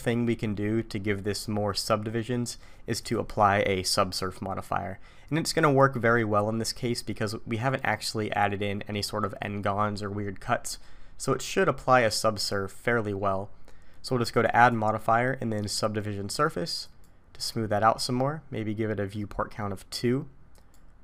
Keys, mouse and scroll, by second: 3.0 click, 11.4 click, 14.6 click, 18.0 middle click, 20.5 click.